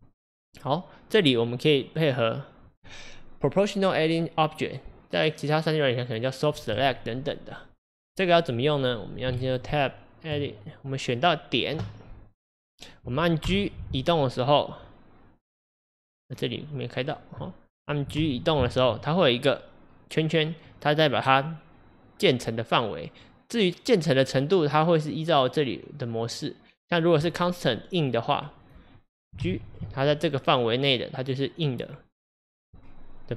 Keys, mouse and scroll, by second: 0.0 click, 0.3 click, 1.2 click, 6.7 click, 9.4 Tab, 11.2 click, 13.5 g, 17.0 click, 18.2 g, 25.4-28.1 drag, 28.7 click, 29.5 g.